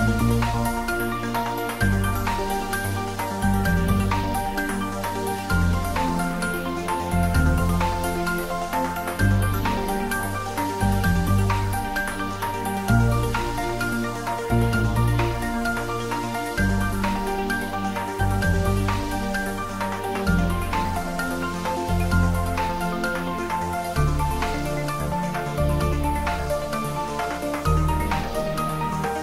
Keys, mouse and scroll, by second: 0.5-1.0 scroll down 1, 1.7 click, 5.4 click, 7.0 s, 7.8 click, 8.1 middle click, 8.7 space, 10.1 space, 10.3-13.3 middle drag, 13.3 click, 14.8 shift+z, 15.4 g, 16.4 click, 17.0 middle click, 17.5 scroll down 1, 18.0 shift+z, 20.4 click, 21.2 g, 23.7 space, 25.0 space, 25.2 middle click, 26.2-26.6 scroll up 1, 26.6 right click, 27.0 click, 27.2 scroll down 1, 27.8 right click, 28.1 click, 28.5 right click.